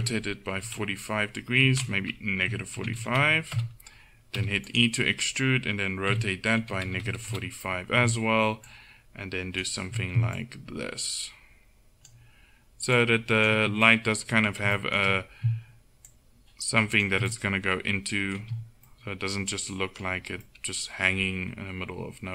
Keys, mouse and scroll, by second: 0.1 r, 2.5 r, 4.4 e, 6.1 r, 8.7-12.1 drag, 13.0-14.1 drag, 14.1 middle click, 14.2 click, 14.3 middle click, 14.4 click, 14.5 middle click, 16.1-17.4 drag, 17.4 middle click, 17.5 click, 17.6 middle click, 18.4 Tab.